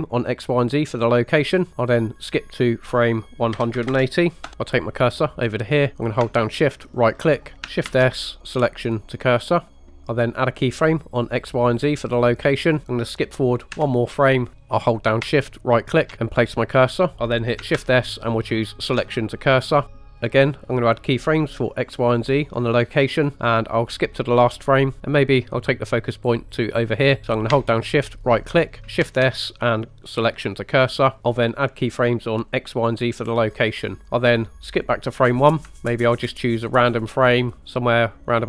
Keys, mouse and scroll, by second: 0.3 drag, 2.9-6.3 drag, 7.0 shift+right click, 7.9 shift+s, 11.0 click, 13.8 Right, 15.8 shift+right click, 17.8 shift+s, 21.8 click, 24.1 click, 28.3 shift+right click, 29.1 shift+s, 32.6 drag, 34.8 click, 35.7 shift+middle click, 36.1 drag, 36.5 middle drag.